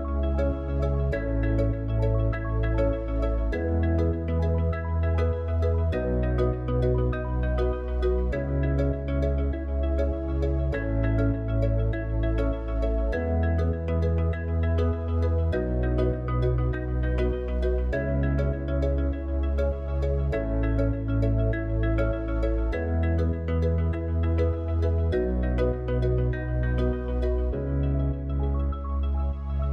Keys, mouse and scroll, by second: 3.2 click, 4.7 scroll down 1, 5.6 s, 8.2 s, 15.8 click, 26.3 click.